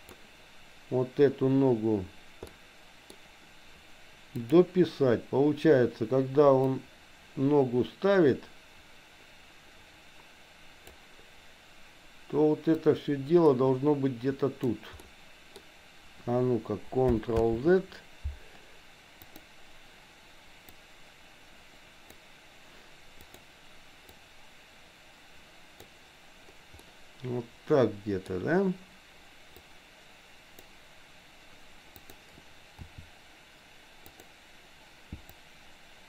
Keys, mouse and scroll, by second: 2.5 middle click, 4.5 click, 6.7-11.0 drag, 12.9-14.7 drag, 15.0 middle click, 17.4 ctrl+z, 19.2 click, 20.6-22.4 drag, 23.2 click, 24.2-26.0 drag, 26.7-28.2 middle drag, 29.6-30.6 drag, 32.0 click, 32.7 r, 35.5 click.